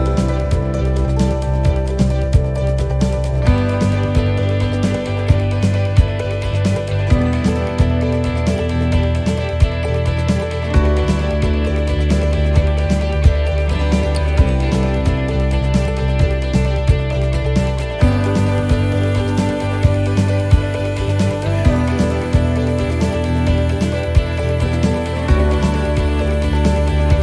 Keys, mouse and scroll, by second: 1.4 shift+right click, 1.8 middle click, 2.3-2.6 scroll down 2, 2.6 middle click, 3.5 e, 5.4 click, 9.2 middle click, 10.1 scroll up 3, 10.5 middle click, 12.5 click, 13.2 right click, 13.9 shift+scroll down 1, 14.1 shift+right click, 14.4 middle click, 15.8 click, 17.2 middle click, 18.5 ctrl+r, 19.3 middle click, 19.3 scroll up 1, 20.5 s, 23.9-24.5 scroll down 8, 24.5 middle click, 25.0 scroll up 2, 25.4 shift+middle click, 25.8-26.1 scroll up 2, 26.1 middle click, 27.1 right click.